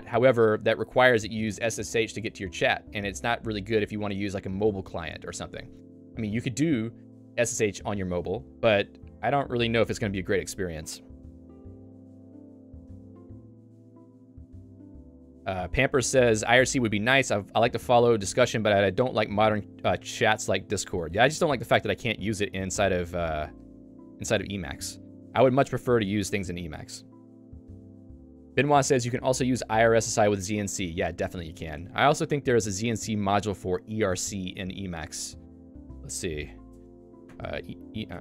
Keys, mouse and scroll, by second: 24.9 ctrl+click, 26.7 Escape, 27.2 j, 36.7 Return.